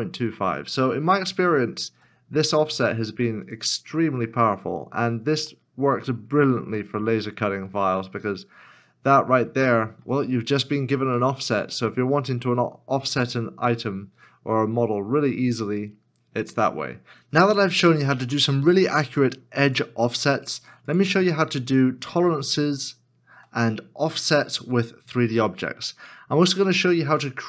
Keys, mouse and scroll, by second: 1.9 x, 3.9 scroll down 1, 5.5 middle click, 9.6 shift+middle click, 11.2 middle click, 21.4 x, 21.4 middle click, 22.6 shift+middle click, 25.9 middle click.